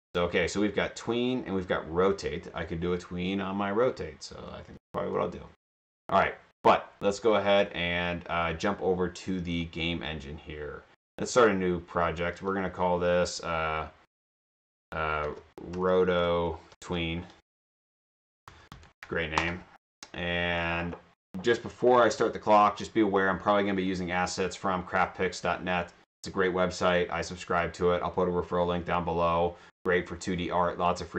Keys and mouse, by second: 5.2 click, 9.8 click, 11.4 click, 15.3-18.7 typing, 19.4 Return, 20.6 click.